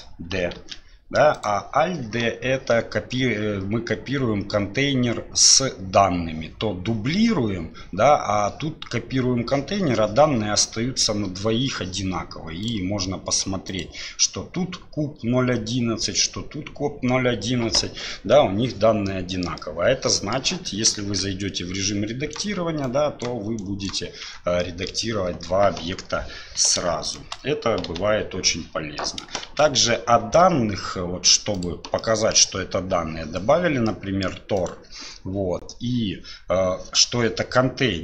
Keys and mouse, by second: 0.6 alt+d, 12.6 click, 13.7 click, 19.1-19.4 middle drag, 19.6-20.4 middle drag, 21.0 Tab, 21.8 click, 22.8 click, 23.6 click, 24.2 Tab, 24.6-24.9 middle drag, 27.0 shift+click, 27.9 Delete, 28.5-29.0 drag, 29.5 shift+a, 32.0-32.3 middle drag, 33.9-34.3 middle drag, 34.6 right click.